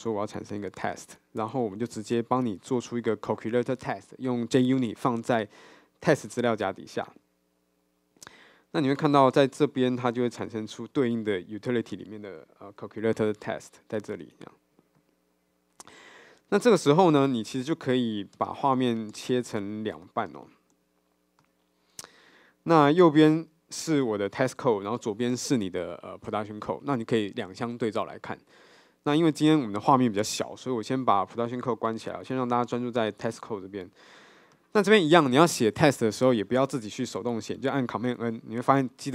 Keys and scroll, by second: 16.8 super+1, 18.5 super+1, 38.3 super+n.